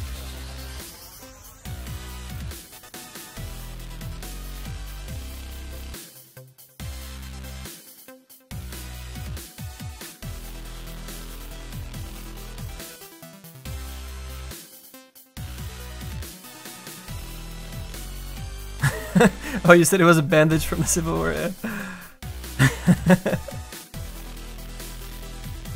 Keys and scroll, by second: 2.1 alt+s.